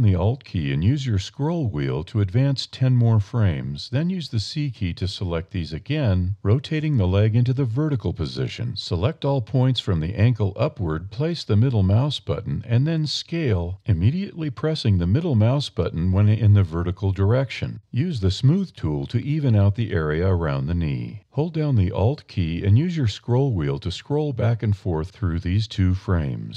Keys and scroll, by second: 3.1 c, 5.5 r, 8.0 c, 11.5 s, 14.6 a, 16.1 d, 16.3 e, 17.4 e.